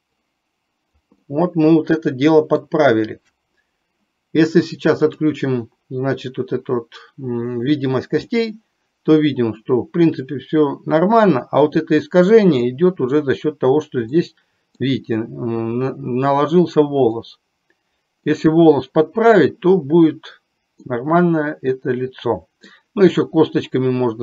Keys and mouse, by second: 0.3 click, 1.3-2.7 middle drag, 8.4-11.9 middle drag, 12.7 middle click, 14.3 middle click, 17.2-18.3 middle drag, 20.9-22.8 middle drag.